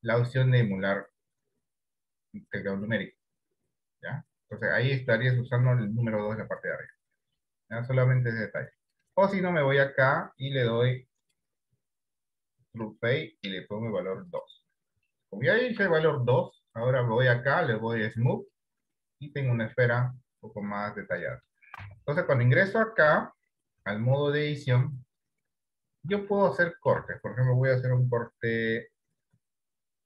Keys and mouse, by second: 10.6 click, 11.6-13.1 drag, 15.5 shift+middle click, 17.1-18.6 drag, 20.3-21.7 middle drag, 22.1 Tab, 23.3 KP_1, 24.5 shift+middle click, 26.8 shift+middle click.